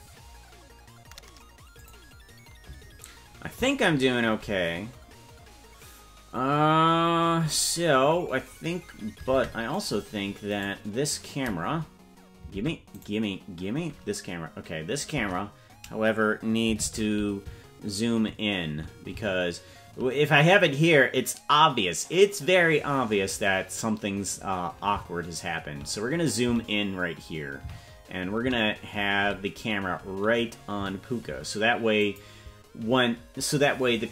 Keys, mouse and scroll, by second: 9.8 right click, 10.5 right click, 12.5 ctrl+Tab, 13.0 right click, 15.1 KP_0, 16.8 shift+`.